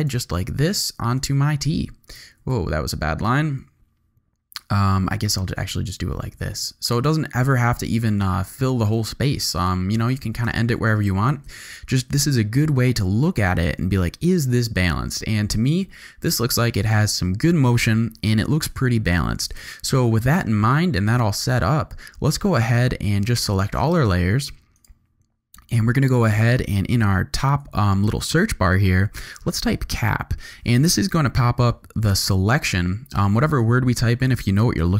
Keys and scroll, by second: 2.4 shift+super+z, 3.2 super+z, 9.3 shift+v, 9.8 z, 10.4 alt+space, 11.4 space, 28.6 c, 29.2 a, 29.5 p.